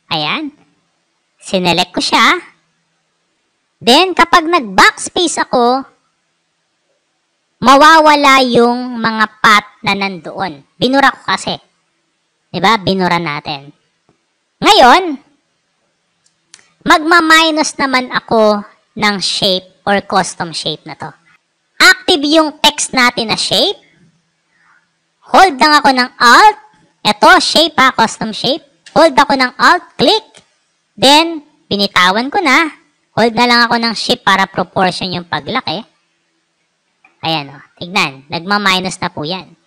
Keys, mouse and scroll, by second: 0.2 click, 1.8-3.2 drag, 4.7 BackSpace, 15.9 right click, 17.6 click, 29.6-36.4 alt+drag, 39.3 click.